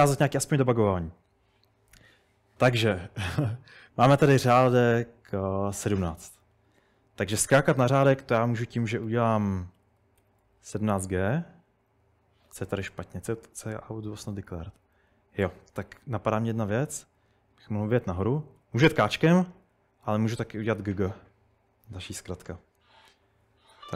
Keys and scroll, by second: 9.1-10.2 typing, 18.1-20.8 typing, 23.7-23.9 typing.